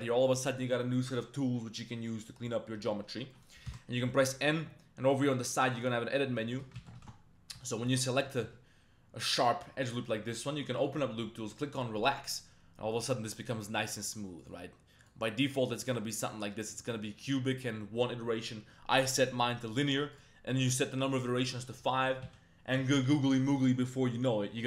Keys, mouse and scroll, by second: 3.3 middle click, 3.7 n, 5.8 click, 6.5 middle click, 6.8 ctrl+z, 7.0 ctrl+z, 7.6 alt+click, 8.6 z, 10.8 click, 12.0 click, 14.1-14.5 drag, 15.1-16.0 drag, 19.2-19.8 drag, 20.2-21.6 drag, 21.9 middle click, 22.3 z.